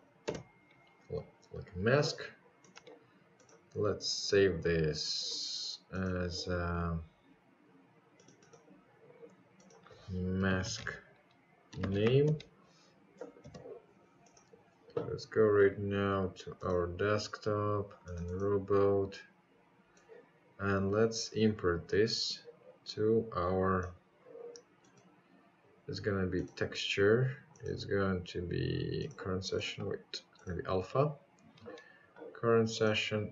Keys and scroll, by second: 5.5-6.4 typing, 7.7 Return.